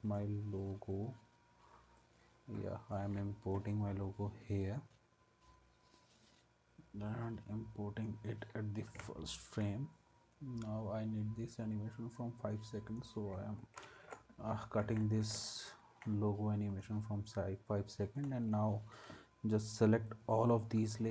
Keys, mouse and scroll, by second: 13.8 alt+], 14.8 ctrl+s.